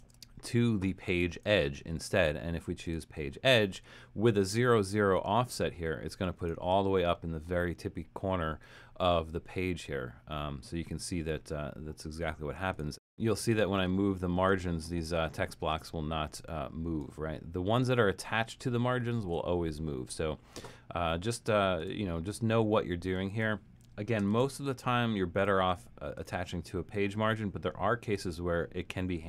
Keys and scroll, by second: 0.0 shift+Return, 19.2 super+z, 24.3 shift+Return.